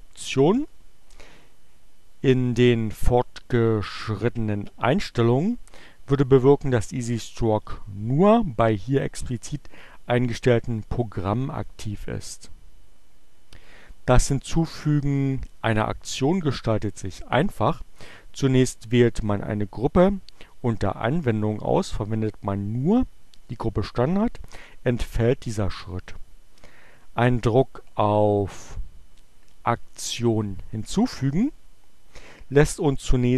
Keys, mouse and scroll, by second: 29.4-31.3 drag.